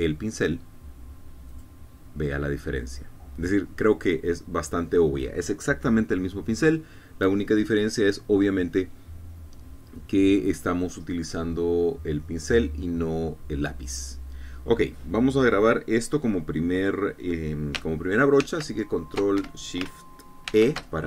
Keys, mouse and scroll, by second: 2.4 click, 19.4 ctrl+shift+s, 20.3 Escape.